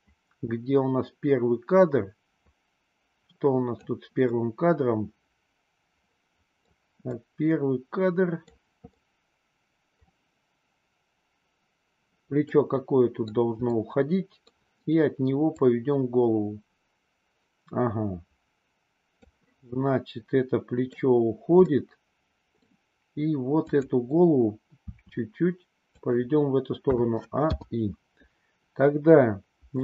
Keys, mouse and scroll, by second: 4.3-6.7 middle drag, 7.1-8.5 middle drag, 9.0 middle click, 12.5-13.3 middle drag, 13.7-14.5 middle drag, 15.6-19.2 drag, 19.7-21.0 middle drag, 21.6-22.7 middle drag, 23.7-24.2 drag, 24.7 r, 26.9 a, 27.5 i.